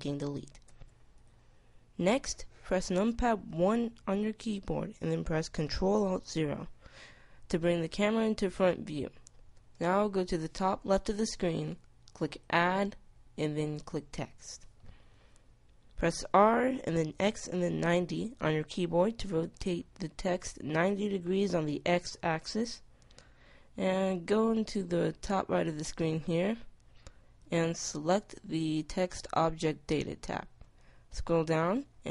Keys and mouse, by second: 0.2 x, 3.0 KP_1, 5.4 ctrl+alt+KP_0, 11.7 click, 15.7 r, 26.9-28.7 drag, 28.7 middle click, 30.6-32.1 middle drag.